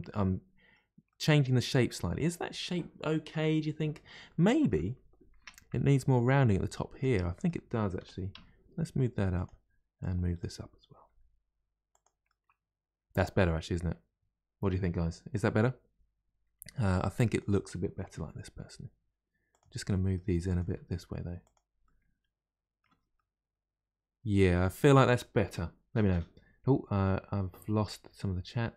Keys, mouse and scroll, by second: 0.0-5.4 middle drag, 5.4 Tab, 5.6 middle click, 6.4 click, 7.1 middle click, 8.0 g, 9.9 click, 11.0 g, 12.2-15.2 middle drag, 17.2 click, 18.1 g, 19.8 middle click, 20.4 click, 20.6 g, 21.8-22.8 middle drag, 22.8 Tab, 23.1-26.2 middle drag.